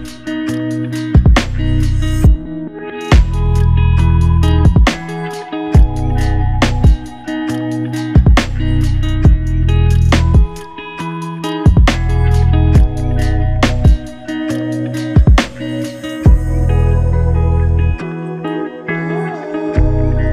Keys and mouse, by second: 1.1 alt+click, 2.7 alt+click, 4.6 ctrl+click, 10.5 double click.